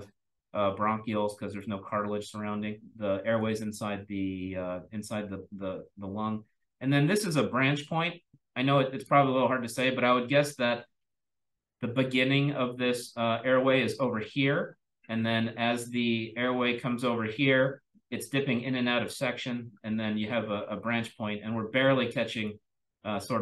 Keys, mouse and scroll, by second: 0.3-1.1 drag, 1.5-3.3 drag, 1.7-3.3 scroll up 1, 8.3-9.2 drag, 8.3-9.2 scroll down 1, 9.2-14.3 scroll down 1, 14.3-21.1 scroll down 1, 21.1-22.0 scroll down 1, 22.0-22.3 drag, 22.0-23.4 scroll up 1.